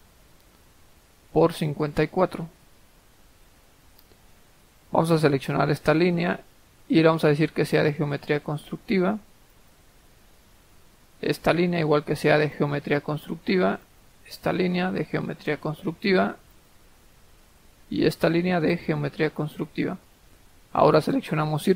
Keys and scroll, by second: 0.0-0.2 typing, 1.8-2.6 typing, 3.2 Escape.